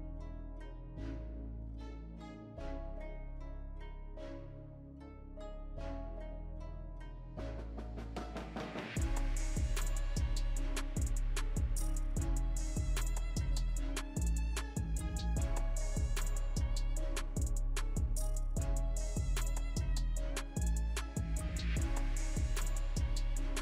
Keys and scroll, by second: 0.6 ctrl+z, 0.8 ctrl+z, 1.0 ctrl+z, 1.1 ctrl+z, 1.3 ctrl+z, 1.4 ctrl+z, 1.5 ctrl+z, 14.5-15.6 typing, 17.4 Return, 22.9-23.6 typing.